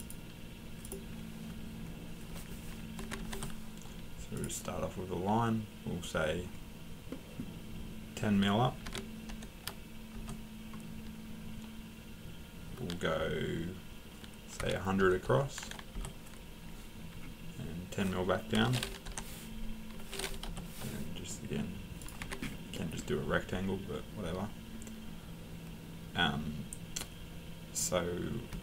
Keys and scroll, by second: 3.0 Escape, 3.2 l, 3.2 Return, 8.6-9.8 typing, 10.1 Return, 14.6 1, 15.9 Return, 18.3-19.0 typing, 20.4 Return, 22.2 Escape.